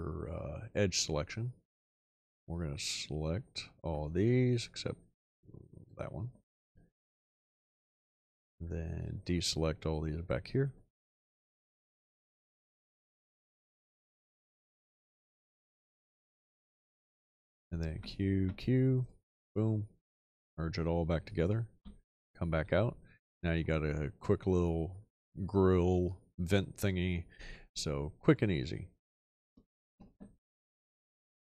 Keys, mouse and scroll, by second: 2.5-3.5 drag, 9.4 ctrl+click, 12.5-16.0 ctrl+drag, 16.7 click, 17.9 q, 21.7 ..